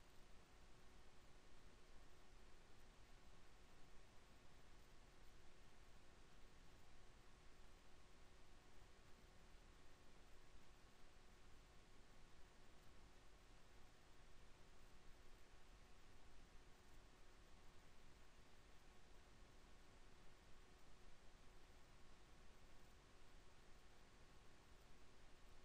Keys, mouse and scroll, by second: 1.3 click, 4.3 shift+a, 6.7 s, 7.7 s, 13.1 Tab, 14.4 z, 15.4 b, 20.1 e.